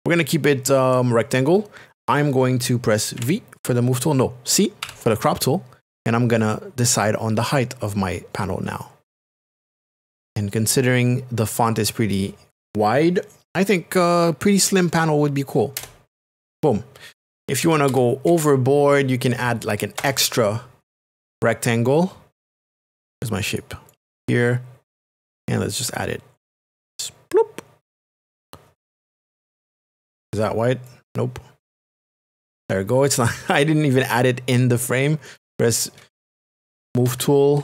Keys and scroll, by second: 3.5 v, 4.8 c, 15.8 Return, 17.3 ctrl+KP_Add, 20.0 Return, 37.1 Right.